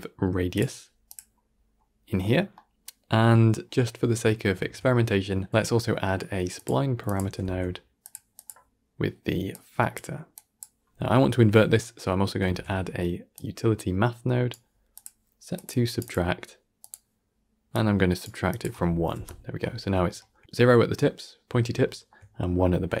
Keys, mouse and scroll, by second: 0.5 shift+a, 6.5 x, 8.0 shift+a, 9.8 click, 14.4 shift+a, 16.8-18.1 drag, 19.0 click, 19.9-23.0 shift+middle drag.